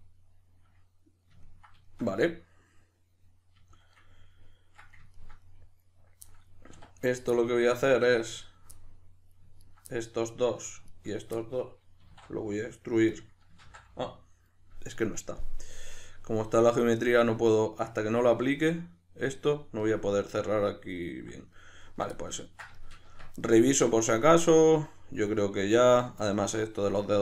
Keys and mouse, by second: 6.8 1, 7.0 right click, 7.4-9.6 middle drag, 9.6 ctrl+right click, 9.9-10.9 middle drag, 10.9 shift+right click, 11.1 shift+right click, 11.4-13.2 middle drag, 12.0 e, 13.2 click, 13.6 ctrl+z, 17.1-27.2 middle drag, 23.1 Tab.